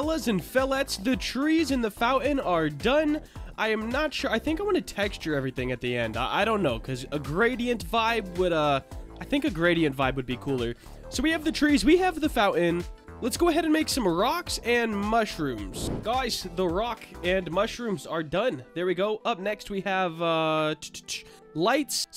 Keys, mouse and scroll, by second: 0.0-0.8 middle drag, 3.5 shift+click, 4.1 click, 5.2 middle click, 16.2-16.6 middle drag, 17.9 middle click.